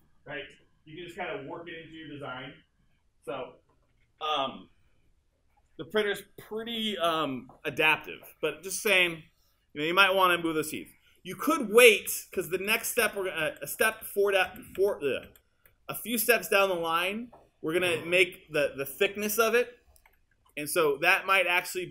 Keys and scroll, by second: 11.7 super+z.